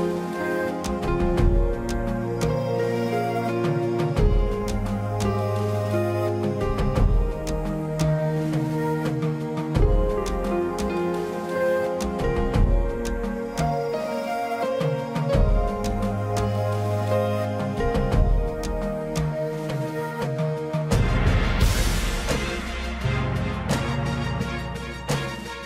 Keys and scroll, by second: 1.1 ctrl+=, 1.2 space, 1.4 ctrl+=, 1.9 space, 3.1 ctrl+alt+z, 4.7 ctrl+=, 4.8 space, 7.4 ctrl+=, 8.2 ctrl+=, 8.9 space, 10.5 ctrl+-, 10.7 ], 15.3 ctrl+=, 20.1 ctrl+alt+z, 21.7 space, 23.6 space, 25.1 space, 25.3 ctrl+=, 25.5 space.